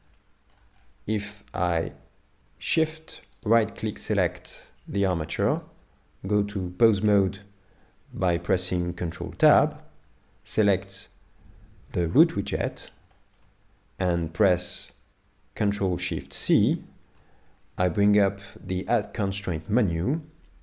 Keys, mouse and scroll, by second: 0.2 middle click, 0.7 scroll up 4, 3.5 shift+right click, 4.1 middle click, 9.4 ctrl+Tab, 10.7 right click, 12.1 middle click, 13.1 shift+middle click, 16.7 ctrl+shift+c.